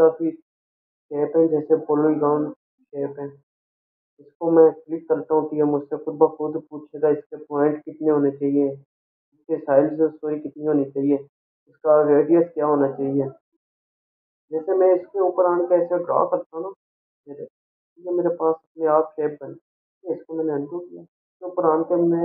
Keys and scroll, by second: 21.3 ctrl+z.